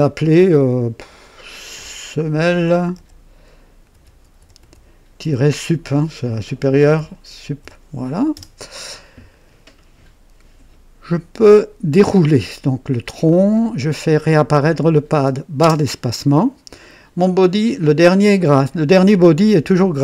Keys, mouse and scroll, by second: 1.0 F2, 2.4-5.2 typing, 6.5-10.3 typing, 11.9 click, 12.5-13.3 right drag, 14.7 click, 15.6 space.